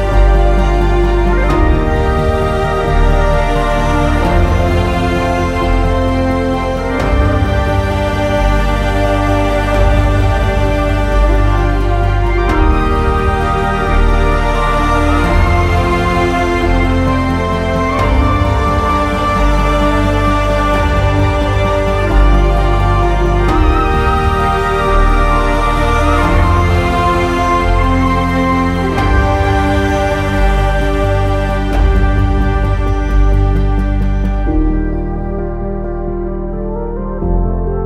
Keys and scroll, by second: 21.9 w, 23.1 ctrl+z.